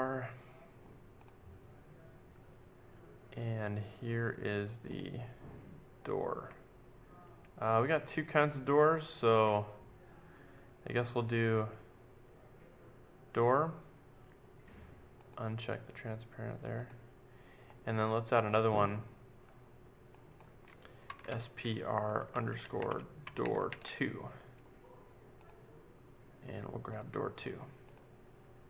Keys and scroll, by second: 21.0-24.2 typing.